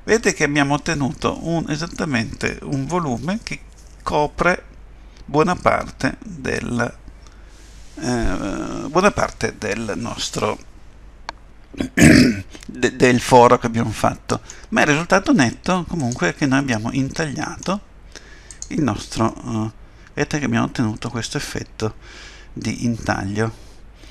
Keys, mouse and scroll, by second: 3.2 middle click, 16.0 click, 16.7 middle click, 19.2 click, 19.3 middle click.